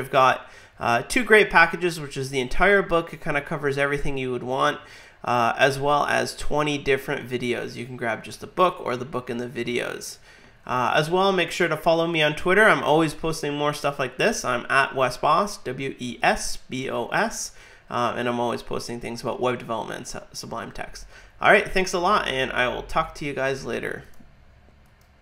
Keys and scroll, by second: 11.0 alt+super+Right.